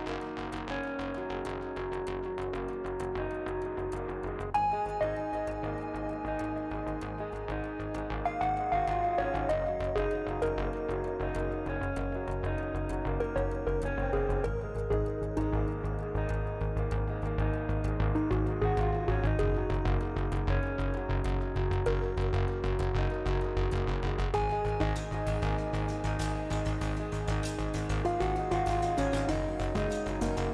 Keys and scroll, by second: 1.8 ctrl+z, 5.9 ctrl+z, 13.6 ctrl+z, 16.3 F3, 27.0 F3, 28.5 F3.